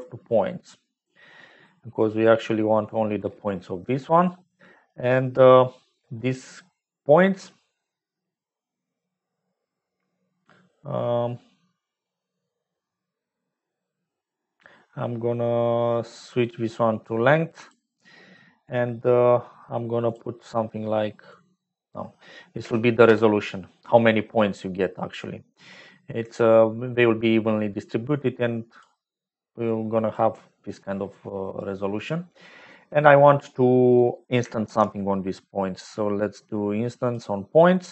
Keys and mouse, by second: 2.9 middle click, 3.2 middle click, 3.4-4.5 middle drag, 4.5 click, 4.8 middle click, 5.2 click, 5.4-7.9 middle drag, 16.0-17.6 drag, 20.1-24.1 drag, 24.6 click, 28.0 click, 29.6 click, 34.2 click, 34.6 shift+a.